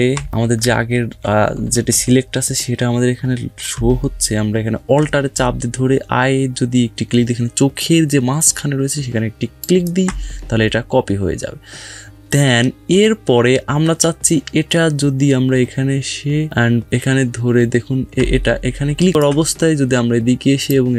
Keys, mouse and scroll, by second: 0.5-1.9 typing, 3.5 typing, 4.1 alt+Num_Lock, 9.4 alt+click, 18.0 alt+Num_Lock, 18.0 alt+click, 19.0 alt+click.